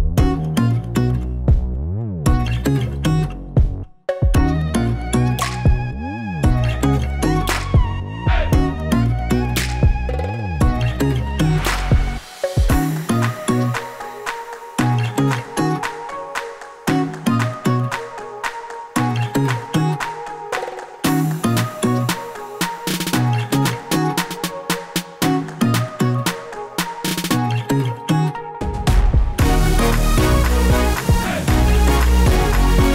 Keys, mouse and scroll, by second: 3.1-3.8 click, 3.2 click, 3.8-4.7 scroll up 4, 4.2 middle click, 4.7-5.2 scroll up 2, 5.0 shift+middle click, 5.8-6.1 scroll down 8, 6.1 shift+middle click, 6.5 middle click, 7.1 shift+a, 9.0 s, 10.0 s, 10.9 shift+middle click, 11.7-12.5 scroll up 2, 12.5-12.8 scroll up 1, 12.8 click, 13.4 click, 14.7 click, 15.2 click, 20.4 click, 21.3 click, 23.3 click, 23.7 click, 26.0 click, 27.6 click, 28.2 click, 29.6 click, 30.3 click, 31.8 click, 31.8-32.8 scroll down 4, 32.2 click, 32.8 click.